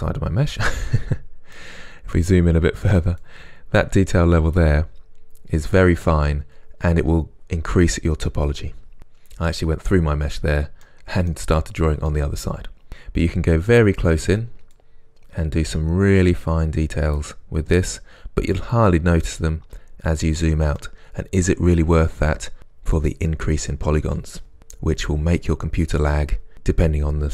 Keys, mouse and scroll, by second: 1.9-2.4 scroll up 1, 3.3-10.9 drag, 4.9 scroll down 1, 9.6 scroll up 1, 10.9-14.8 middle drag, 11.6-12.1 scroll down 2, 12.9-14.8 scroll up 2, 14.8-20.8 drag, 17.8-18.4 scroll down 2, 20.8-27.3 middle drag.